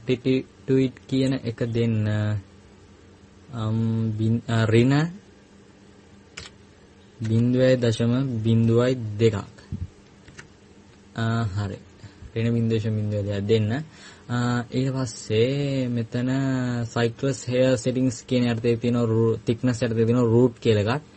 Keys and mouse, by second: 2.0-7.0 drag, 12.5-13.5 middle drag.